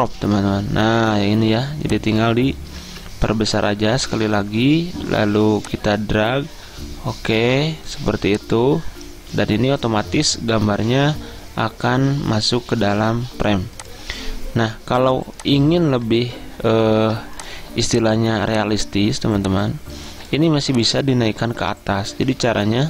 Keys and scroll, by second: 2.9 ctrl+z.